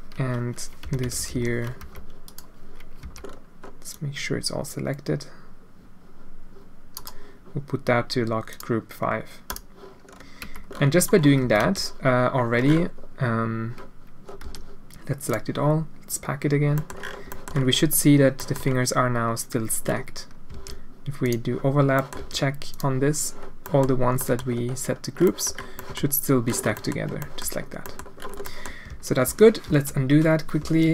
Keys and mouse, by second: 0.8 l, 1.0 l, 1.3 l, 1.8 g, 3.0 c, 8.5 click, 9.5 click, 10.4 Tab, 11.4 Tab, 11.6 a, 14.4 a, 15.4 click, 16.8 middle click, 17.3 middle click, 18.4 click, 20.5 alt+a, 21.2 click, 22.0 click, 22.2 a, 22.8 drag, 23.7 click, 24.2 middle click, 25.3 middle click, 25.7 click, 26.8 click, 27.3 middle click, 27.9 middle click, 28.5 middle click, 28.9 ctrl+z, 29.2 ctrl+z, 29.7 ctrl+z, 30.6 ctrl+z.